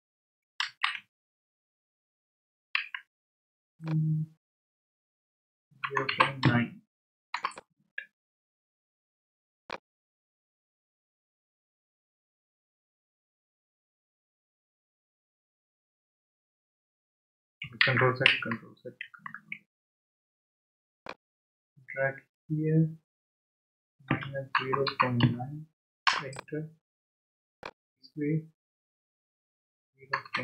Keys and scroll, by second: 0.6 ctrl+z, 2.7 ctrl+z, 5.6-6.9 typing, 7.3 Return, 17.8 ctrl+z, 23.8-25.7 typing, 26.1 Return, 29.7-30.4 typing.